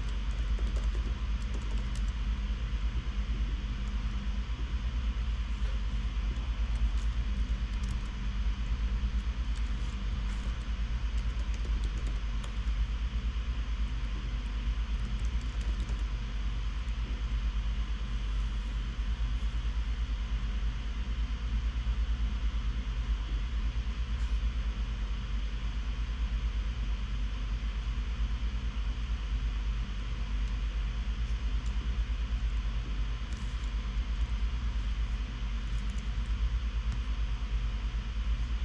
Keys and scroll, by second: 0.0-2.7 typing, 7.4 super+s, 7.7 super+Right, 8.2 Return, 8.4 Return, 9.0 q, 9.2 q, 9.3 q, 9.7 Escape, 10.1 super+s, 10.6 shift+super+], 10.9 super+f, 11.1-13.4 typing, 15.5-17.3 typing, 19.8 typing, 33.9 super+c, 34.7 shift+super+[, 36.4 shift+super+[.